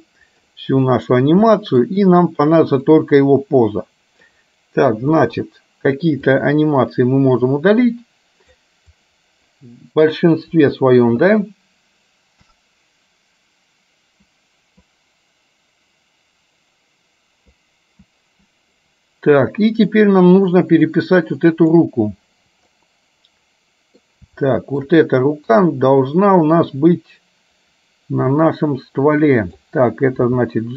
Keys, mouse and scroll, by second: 1.8 middle click, 3.0-4.4 drag, 5.3 Delete, 6.5-8.8 drag, 9.0 click, 10.7 Delete, 21.7 click, 22.8-24.2 middle drag, 24.5 shift+middle click, 26.2-29.7 middle drag, 30.3 g.